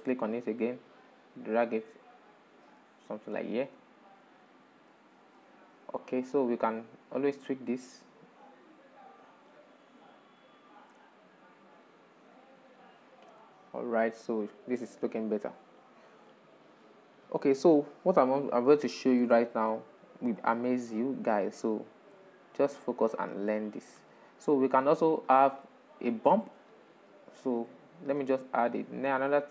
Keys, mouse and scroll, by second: 0.0-0.6 drag, 3.0-4.6 middle drag, 4.6-4.9 scroll down 3, 5.2 middle click, 6.6-8.2 middle drag, 8.2 click, 9.2 click, 13.6-18.6 middle drag, 18.6 scroll down 5, 19.0-20.3 shift+middle drag, 20.3 click, 21.2-21.9 shift+middle drag, 21.9 click, 22.4-23.6 shift+middle drag, 23.6 click, 25.0-26.9 drag, 26.9 shift+middle click, 27.5-28.5 drag, 28.5-29.5 shift+middle drag.